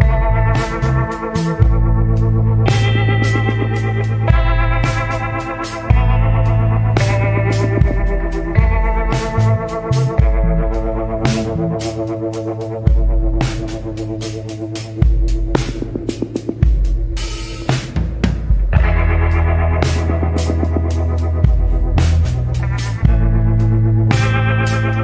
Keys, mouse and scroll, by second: 1.3 scroll down 1, 3.4 scroll up 1, 8.0 scroll down 1, 13.9 scroll down 1, 15.4 scroll up 1, 19.4 scroll up 1, 23.2 scroll down 1.